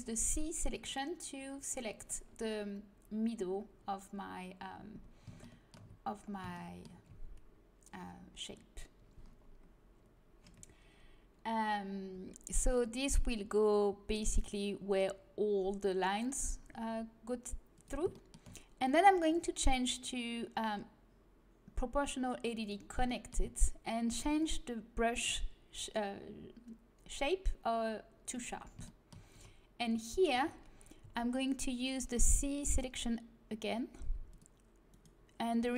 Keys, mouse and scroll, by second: 0.0 c, 1.3-5.2 middle drag, 12.1 g, 16.7 g, 19.2-23.0 drag, 23.0-24.2 middle drag, 24.2-28.6 drag, 28.6 middle click, 29.3 z, 29.9 z, 30.3 a, 31.0 c, 35.5-35.7 middle drag.